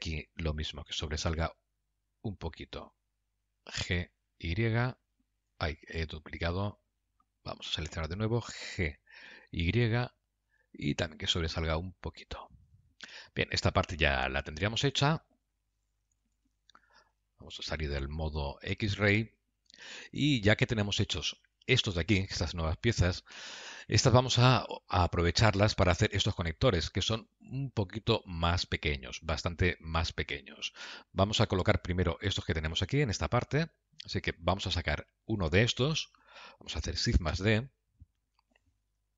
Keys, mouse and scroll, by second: 1.3 y, 4.0 g, 6.4 ctrl+z, 8.0 click, 9.3 g, 13.6 middle click, 17.4 shift+z, 18.3 shift+z, 19.0 alt+z, 19.7 middle click, 21.7 Tab, 22.0 click, 22.9 KP_Decimal, 23.8-24.5 scroll down 13, 24.7 middle click, 34.5 click, 37.6 shift+d.